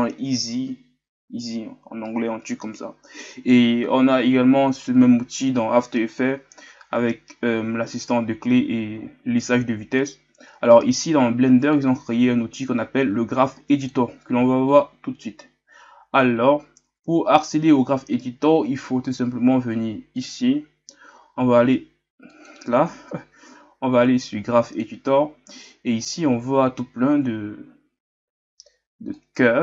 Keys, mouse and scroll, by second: 11.7-29.6 drag.